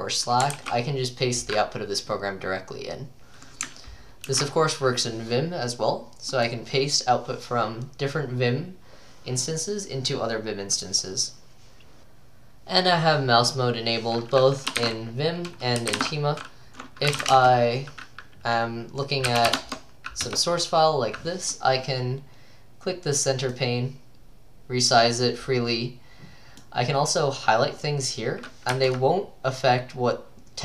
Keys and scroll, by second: 0.6 ctrl+v, 4.4 alt+F4, 15.0-17.9 typing, 16.3 ctrl+d, 16.3 ctrl+c, 19.0-20.0 typing, 20.3 Return, 28.7 Escape.